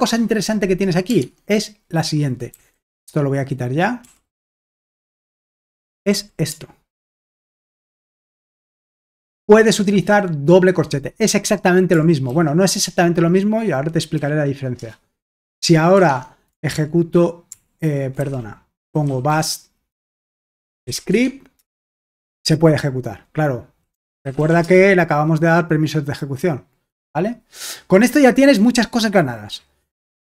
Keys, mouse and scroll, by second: 1.3 alt+Tab, 2.5 typing, 4.0-6.9 typing, 7.5 Escape, 8.1-9.4 typing, 12.3 shift+;, 14.1 w, 14.8 Return, 16.2 alt+Tab, 16.7 ctrl+p, 17.5 ctrl+p, 18.2 ctrl+c, 18.4-21.6 typing, 23.7-24.9 typing.